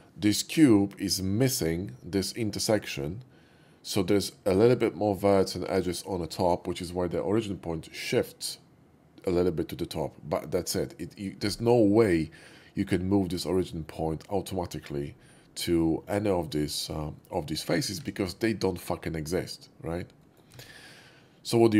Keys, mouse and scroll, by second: 10.8 typing, 12.0-14.8 middle drag, 15.8 middle click, 17.2 middle click, 18.0 Tab, 20.1 middle click.